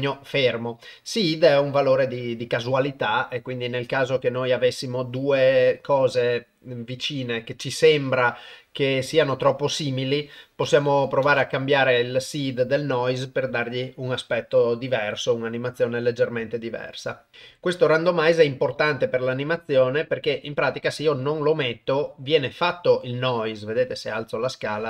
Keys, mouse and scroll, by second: 0.6 drag, 8.6-10.1 drag, 11.2 shift+space, 19.5-20.2 drag, 24.0-24.8 drag.